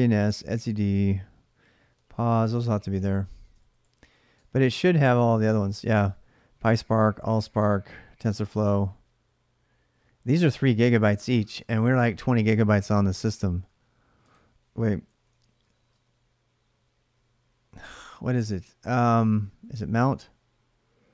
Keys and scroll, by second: 1.7-4.3 typing, 14.8-16.0 typing, 19.0-20.2 typing.